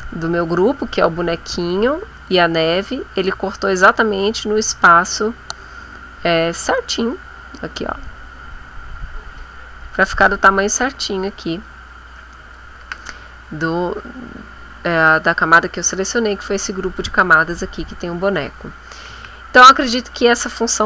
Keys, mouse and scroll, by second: 0.4 click, 1.6 click, 2.1 click, 7.0-7.7 scroll up 2, 8.4-8.9 scroll down 3, 9.9 click, 12.1 click, 19.0 ctrl+z.